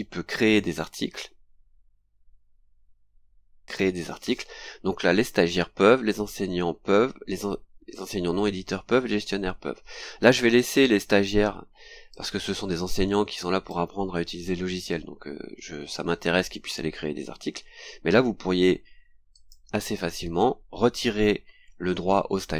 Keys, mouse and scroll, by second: 0.0-0.4 scroll down 2, 1.0-1.3 scroll down 2, 2.1-2.4 scroll down 2, 3.2-3.5 scroll down 2, 12.1-13.8 drag, 19.3 click.